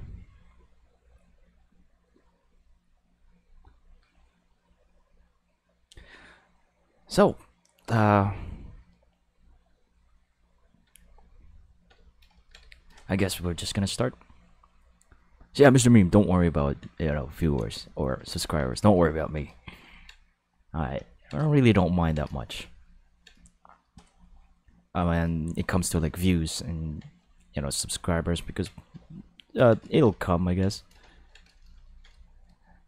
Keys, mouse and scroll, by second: 12.7 shift+middle click, 16.0 ctrl+middle click, 17.2 ctrl+middle click, 17.8 shift+middle click, 18.8 shift+middle click, 19.1 ctrl+middle click, 19.8 ctrl+middle click, 22.7 ctrl+middle click, 23.4 shift+middle click, 24.3 shift+middle click, 25.3 shift+middle click, 26.1 ctrl+middle click, 27.3 shift+middle click, 27.8 ctrl+middle click, 29.0 ctrl+middle click, 29.9 shift+middle click, 30.2 ctrl+middle click, 30.7 shift+middle click, 31.1 ctrl+middle click, 31.6 shift+middle click, 31.8 ctrl+middle click, 32.2 shift+middle click.